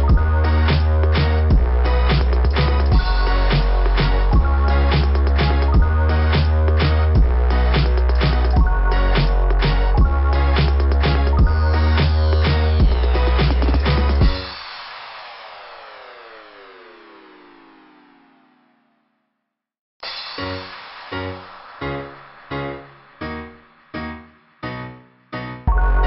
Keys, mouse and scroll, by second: 1.1 click, 2.3 right click, 2.4 click, 2.5 right click, 3.7 click, 3.7 right click, 3.9 click, 5.9 scroll down 2, 9.8 scroll down 2, 11.0-12.2 scroll down 4, 13.1 scroll down 1, 14.1 click, 18.4 typing, 20.6 typing, 20.7 click, 20.7 click, 22.9 click, 23.4 click, 23.7 click, 25.0 click, 25.7 scroll down 2.